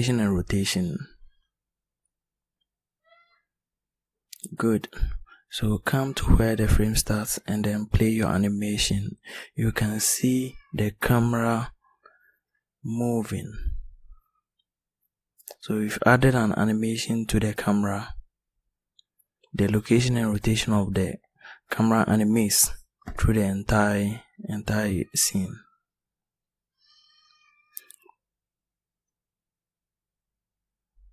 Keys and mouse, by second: 2.6 i, 30.2-31.1 drag.